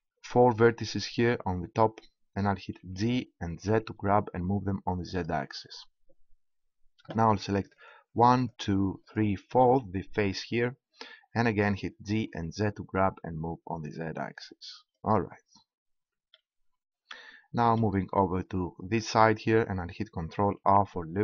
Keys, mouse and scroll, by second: 2.8 g, 7.7-11.5 right drag, 12.8 g, 14.8-18.1 drag, 20.5 ctrl+r.